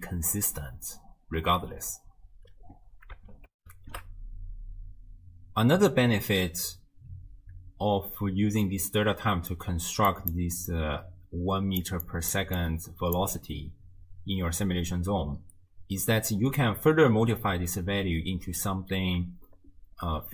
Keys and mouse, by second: 3.6 ctrl+alt+shift+w, 3.8 ctrl+alt+shift+q, 9.0-9.5 drag, 9.7-10.6 d, 10.1 click, 10.7-11.8 drag, 10.7-12.5 d, 12.0 click, 12.6 click, 13.2 d, 14.0 d.